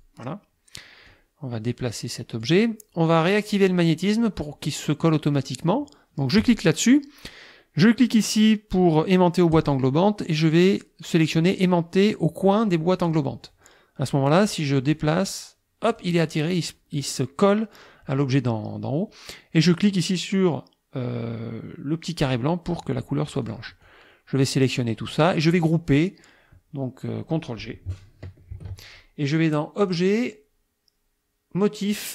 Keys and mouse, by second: 1.1-2.6 drag, 6.4 click, 9.5 click, 13.1 click, 14.9-16.2 drag, 22.3 click, 23.5 click, 23.9-25.1 drag, 28.5 ctrl+g, 29.9 click.